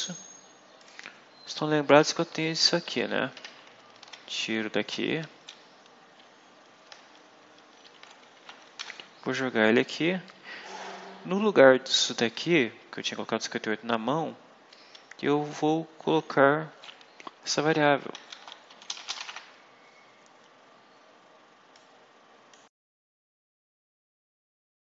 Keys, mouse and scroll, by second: 0.7 click, 1.8 Home, 3.2 shift+End, 3.9 ctrl+shift+x, 5.1 Up, 6.7 Down, 8.2 shift+End, 8.7 ctrl+shift+v, 9.6 Left, 11.9 Right, 14.0 Left, 15.8 Delete, 17.1-19.7 typing, 21.6 click.